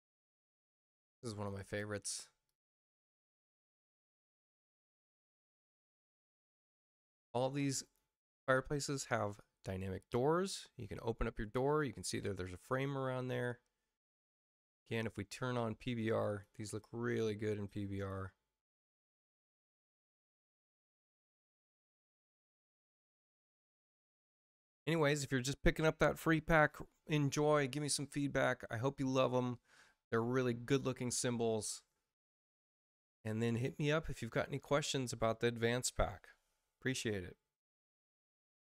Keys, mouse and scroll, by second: 0.0 click, 0.5 click, 2.4 click, 5.9 space, 7.3 space, 7.8 click, 9.6 click, 13.2 click, 16.2 click.